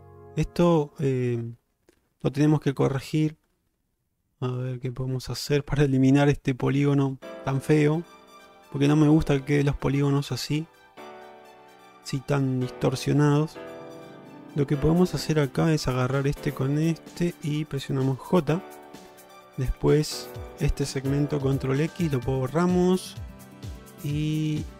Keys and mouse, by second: 4.7 middle click, 11.1 middle click, 17.1 shift+click, 18.3 j, 19.7 3, 20.1 2, 21.6 ctrl+x, 22.3-24.7 middle drag.